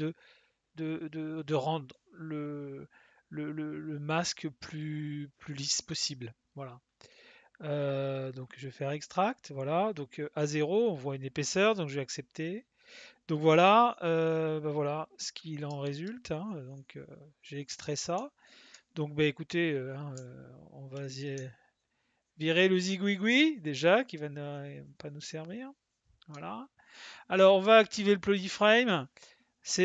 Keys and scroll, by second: 20.1 s.